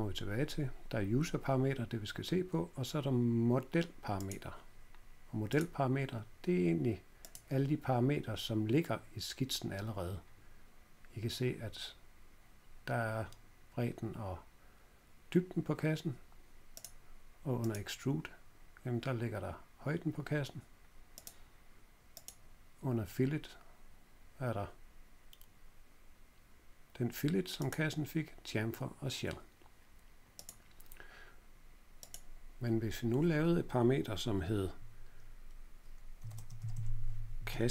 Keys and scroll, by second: 35.9-37.7 typing.